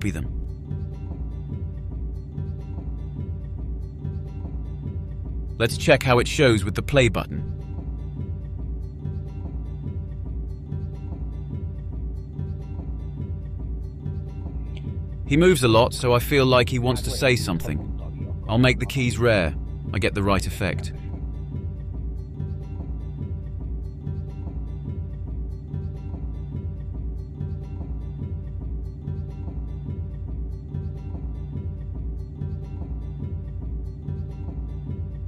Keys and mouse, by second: 0.1-0.6 drag, 1.5 ctrl+c, 3.5-5.2 drag, 5.2 ctrl+v, 7.3 click, 16.3 click, 17.6-18.5 drag, 18.5 Delete, 19.2-19.5 drag, 20.1 click, 20.2 click, 26.0-26.6 drag, 26.8-27.7 drag, 27.5 Delete, 28.0-28.3 drag, 28.6-29.7 drag, 30.5 click, 32.5 click.